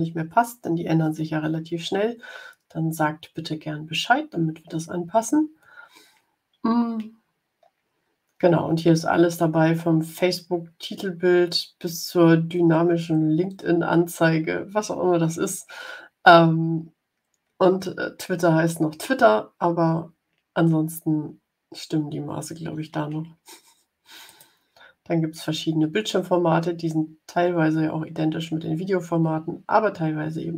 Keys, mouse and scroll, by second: 7.5 scroll down 1, 8.6 scroll up 2, 11.6 scroll down 2, 15.2-15.9 scroll down 4, 21.8-22.6 scroll up 4, 24.2 click.